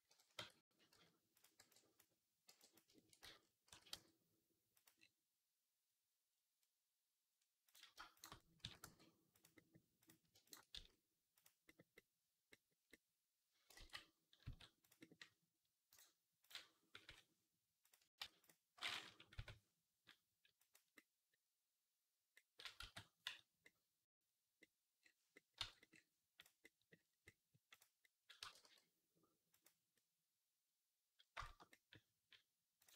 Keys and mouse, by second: 0.0-3.5 typing, 0.2 Tab, 6.4-13.1 right drag, 7.5 click, 7.5 middle click, 8.0 shift+click, 8.0 shift+middle click, 8.4 s, 9.4 s, 9.8 click, 10.6 s, 13.1-14.8 drag, 13.6 ctrl+z, 14.3 s, 14.8-29.8 right drag, 15.7-17.7 drag, 16.9 i, 18.0 ctrl+z, 19.2 i, 22.6 x, 25.4 Tab, 27.6 click, 28.2 g, 29.8-32.9 drag.